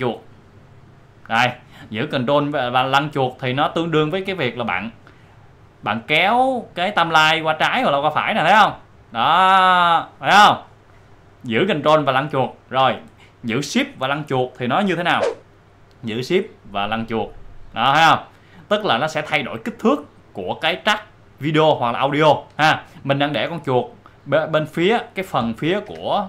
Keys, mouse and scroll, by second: 0.3-1.0 ctrl+scroll down 1, 4.6 scroll up 1, 5.6 ctrl+scroll up 1, 12.9-13.4 ctrl+scroll down 1, 13.6 click, 15.3 click, 16.0 shift+scroll down 1, 18.5-18.8 shift+scroll up 1, 25.9 shift+scroll up 1.